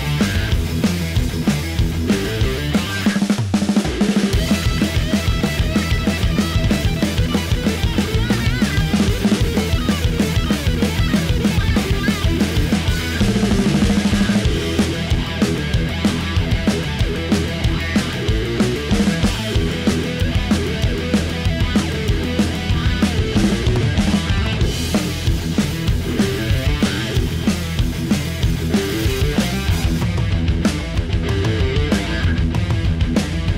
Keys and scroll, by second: 6.3 F1.